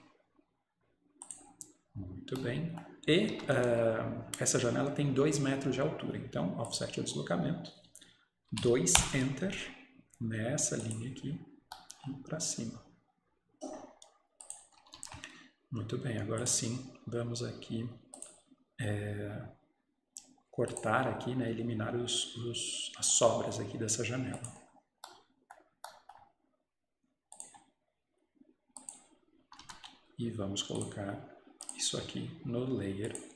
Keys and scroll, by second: 3.2 Escape, 3.4 Escape, 3.4 typing, 9.0 Return, 9.3 typing, 14.9 Escape, 15.0 Escape, 29.5 Escape, 29.7 Escape.